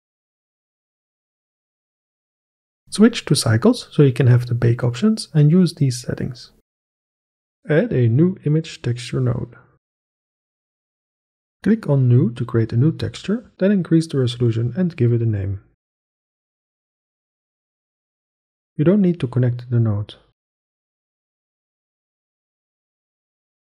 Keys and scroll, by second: 8.7 shift+a, 9.9-10.8 typing, 14.2 KP_2, 14.5 Return, 15.2-16.8 typing.